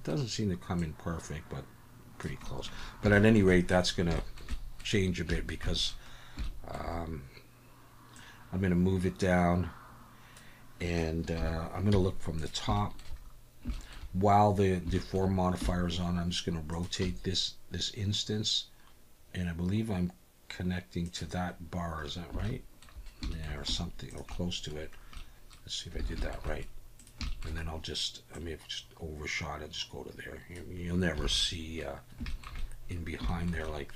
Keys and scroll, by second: 11.4 KP_7, 11.9 z, 15.6 r, 17.0 g, 23.7 z, 26.0 alt+a, 31.2 alt+a.